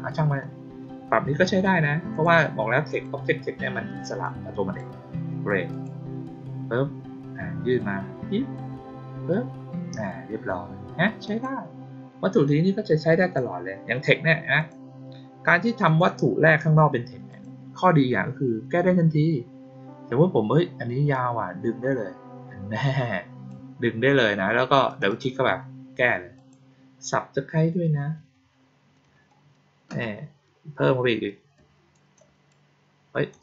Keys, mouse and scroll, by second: 2.0 click, 2.8 click, 4.1-4.7 drag, 5.6 click, 11.2 click, 13.1 click, 14.5 click, 15.8 click, 17.2 click, 21.0-23.4 drag, 24.8 click, 25.0 click, 26.3 click.